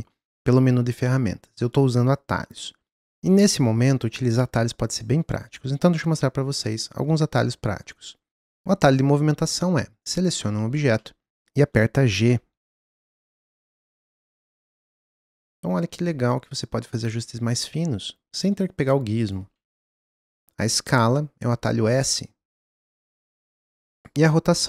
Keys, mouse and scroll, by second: 8.5-8.9 middle drag, 10.6 scroll up 4, 10.9-12.5 middle drag, 12.4 g, 16.0 g, 21.6 s.